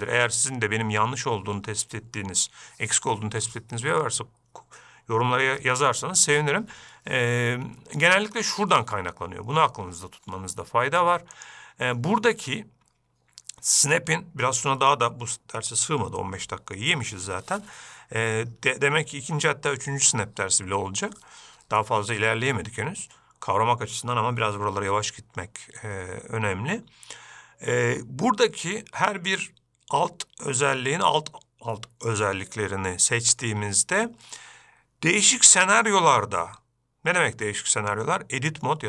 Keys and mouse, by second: 11.9-38.8 drag.